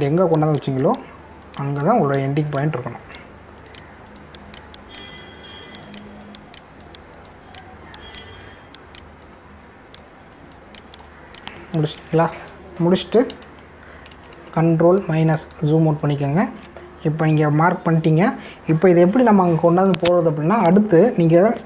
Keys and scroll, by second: 15.1 ctrl+-.